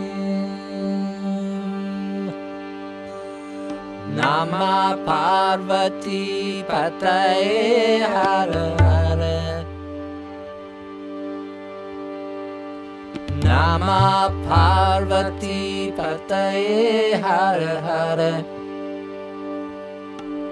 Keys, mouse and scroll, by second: 1.1 click, 2.0 click, 2.7 click, 3.8 click, 4.7 click, 6.0 click, 7.7 click, 10.0 click, 11.5 click, 12.3 click, 13.3 click, 14.2 click, 15.6 click, 16.9 click, 17.7 click, 18.6 click, 19.3 click, 20.3 click.